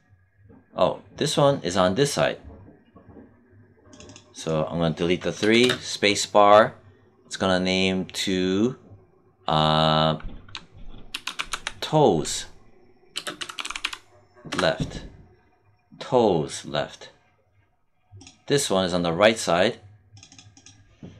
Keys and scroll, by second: 5.3 BackSpace, 5.5 space, 11.0 t, 13.0 space, 13.2 l, 14.4 Return.